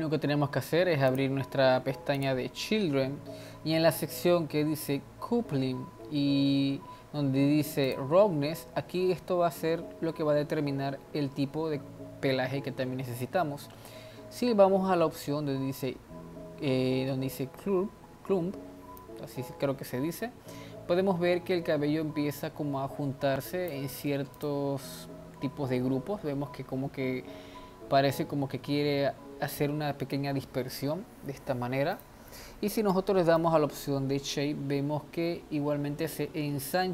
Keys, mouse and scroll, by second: 1.1-2.6 drag, 2.6-4.8 scroll down 7, 4.8-8.3 drag, 8.3-8.9 scroll down 4, 19.0-22.2 drag, 24.4 click, 25.1-25.8 scroll up 3, 27.8 scroll down 3, 28.5-28.8 scroll up 2, 29.2 scroll down 1, 31.0 scroll up 1, 31.9 click, 33.5-36.7 drag.